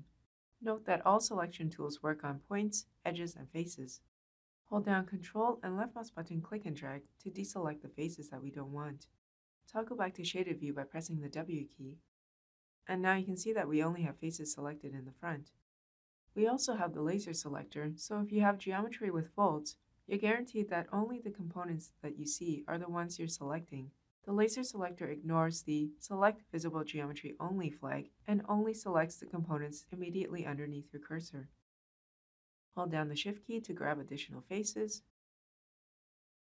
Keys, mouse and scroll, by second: 4.8-6.5 ctrl+drag, 10.2 w, 25.5-31.2 drag, 31.9-33.1 shift+drag, 36.1-36.4 shift+drag.